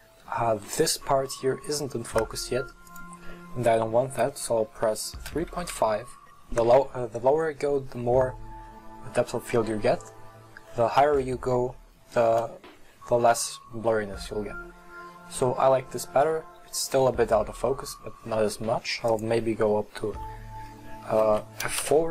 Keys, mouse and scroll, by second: 19.1-22.1 drag.